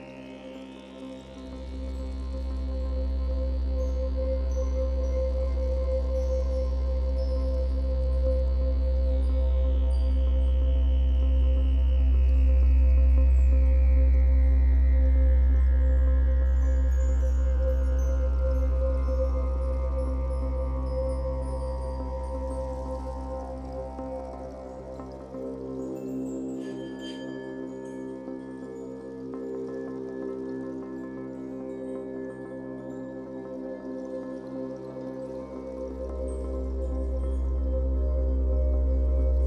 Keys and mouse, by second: 0.0 click, 4.3-4.9 typing, 5.1 click, 5.3 ctrl+=, 6.2 space, 6.4 click, 9.7 click, 13.3 space, 13.5 click, 13.9 space, 15.4 space, 16.5 space, 16.6 click, 16.7 space, 17.3 click, 18.4 space, 18.4 click, 18.5 space, 18.9 click, 19.0 space, 20.1 ctrl+-, 20.2 space, 20.5 =, 20.6 space, 21.9 space, 22.0 click, 22.1 space, 22.3 click, 22.4 space, 25.6-28.1 typing, 25.6 click, 27.7 click, 28.6 click, 29.5 ctrl+z, 30.0-32.1 typing, 30.1 click, 31.8 click, 32.0 ctrl+-, 32.2 Insert, 32.5 Insert, 33.2 0, 34.6 click, 35.9-37.7 typing, 37.5 click.